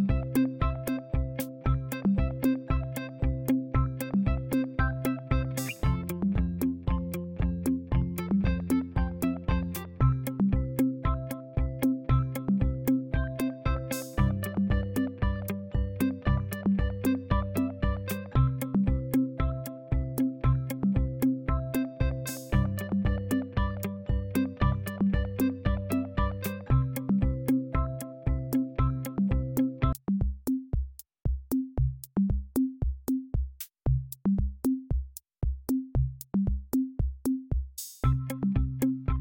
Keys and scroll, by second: 9.3-14.9 typing, 12.1 Return, 36.5 Caps_Lock, 36.6-38.0 typing.